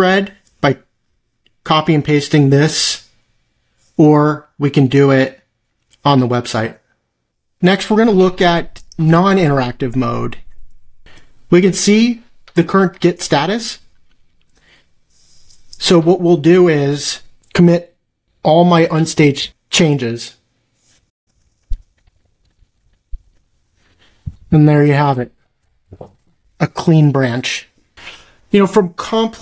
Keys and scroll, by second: 22.1 typing, 22.8 ctrl+b, 25.9 ctrl+c.